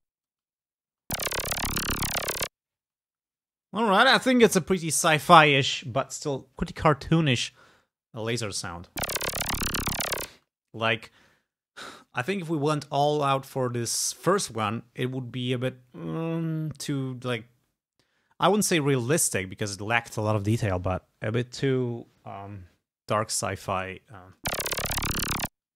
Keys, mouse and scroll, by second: 0.4 space, 2.9 space, 8.9 space, 10.4 space, 24.3 space, 25.6 space.